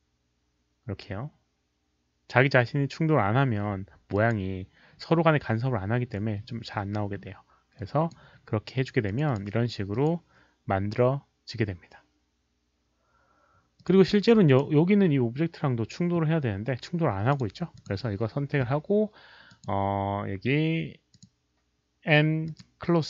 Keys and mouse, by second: 1.1 alt+click, 1.1 alt+middle click, 1.1 alt+right click, 2.1 alt+click, 2.1 alt+middle click, 2.1 alt+right click, 4.1 alt+click, 4.2 alt+middle click, 4.2 alt+right click, 6.1 middle drag, 7.7-8.1 drag, 9.0 click, 9.2 click, 9.9 click, 13.7 click, 14.4 click, 17.3 click, 17.7 click, 19.4 click, 21.1 click, 22.4 click.